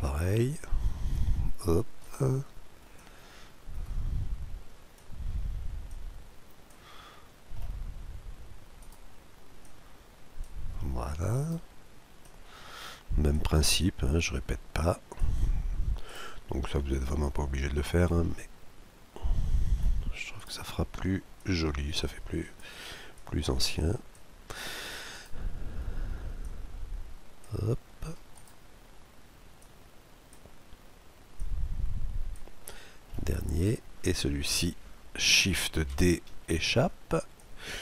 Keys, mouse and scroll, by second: 0.5-2.2 drag, 2.0-3.6 right drag, 2.9-4.6 drag, 5.9-7.6 drag, 7.1-8.8 middle drag, 8.8-10.7 right drag, 9.6-11.4 drag, 9.6 scroll down 1, 11.4-13.3 right drag, 12.2-14.0 drag, 14.1-16.0 drag, 16.1-17.7 right drag, 17.1-18.7 drag, 18.5-21.3 middle drag, 20.3-22.6 right drag, 21.4-23.0 drag, 23.2-24.8 drag, 25.1-26.9 right drag, 26.4-28.1 drag, 28.4-30.3 right drag, 29.6-31.3 drag, 31.4-33.1 drag, 32.6-34.3 middle drag, 33.5-35.2 right drag, 35.4 right click, 35.8 shift+d, 37.4-37.8 drag.